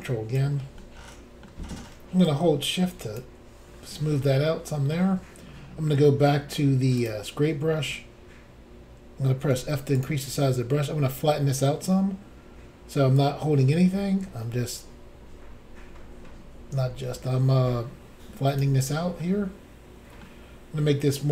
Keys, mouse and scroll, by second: 0.8 middle click, 2.2 shift+click, 3.7-4.2 scroll down 1, 4.2 middle click, 7.0 click, 7.4 middle click, 8.2 scroll down 1, 9.5 f, 10.0 click, 13.2 click, 19.2 middle click.